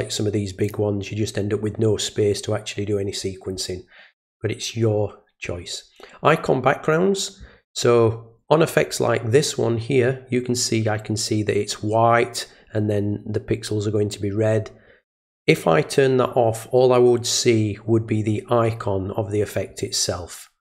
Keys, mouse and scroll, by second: 0.6 click.